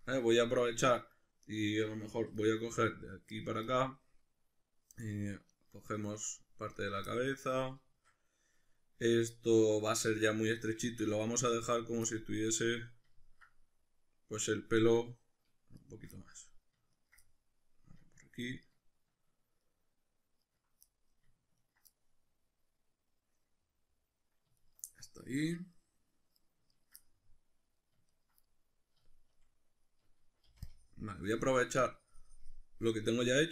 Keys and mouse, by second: 1.1 right click, 2.2 3, 2.4 right click, 3.3 ctrl+right click, 3.7-5.5 middle drag, 5.5 ctrl+right click, 6.8 ctrl+right click, 7.1-10.5 middle drag, 10.5 ctrl+right click, 10.9 shift+middle click, 11.7 ctrl+right click, 12.1-15.8 middle drag, 15.8 shift+right click, 16.1-16.9 middle drag, 16.9 ctrl+right click, 17.2-18.2 middle drag, 18.2 ctrl+right click, 18.7 ctrl+right click, 19.7 ctrl+right click, 20.5 ctrl+right click, 20.8-21.6 middle drag, 21.6 ctrl+right click, 21.9-24.6 middle drag, 24.6 shift+right click, 24.9-26.7 middle drag, 26.7 ctrl+right click, 27.0-28.1 middle drag, 28.1 ctrl+right click, 28.3-30.3 middle drag, 30.5 c, 33.4 right click.